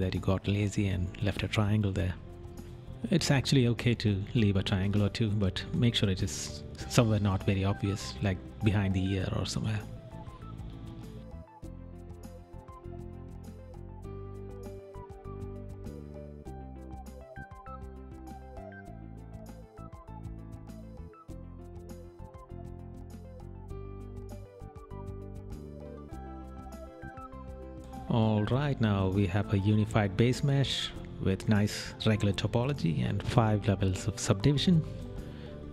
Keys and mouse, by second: 1.5 right click, 5.5 right click, 7.0 right click, 7.8 right click, 9.0 right click, 10.1 right click, 11.8 right click, 13.5 right click, 14.2 right click, 16.7 right click, 17.6 right click, 18.5 right click, 26.4 right click, 28.0 right click, 32.1 right click, 34.1 right click.